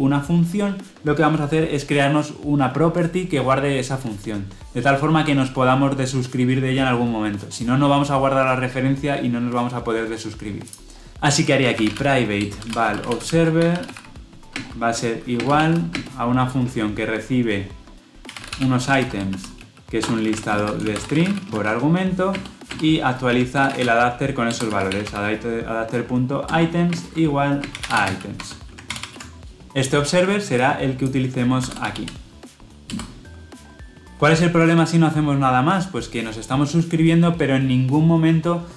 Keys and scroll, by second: 11.1 ctrl+z, 12.3 Return, 24.4 Return, 28.2 Escape, 28.7 ctrl+alt+l, 32.8 Return.